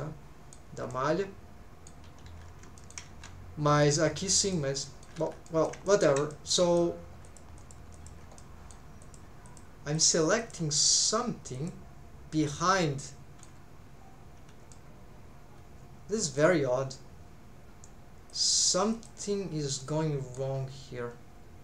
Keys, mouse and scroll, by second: 0.9-2.0 middle drag, 2.3 alt+z, 2.8 shift+middle click, 3.1 alt+z, 4.4 click, 4.8 middle click, 5.5 middle click, 5.9 shift+middle click, 6.3 middle click, 7.2 click, 7.6 click, 7.9 click, 8.4 middle click, 9.0 click, 9.4 click, 9.9 click, 11.0 click, 11.5 click, 12.8 middle click, 14.7-16.4 middle drag, 18.3 click, 18.9 click, 19.8 middle click, 20.6 scroll down 1.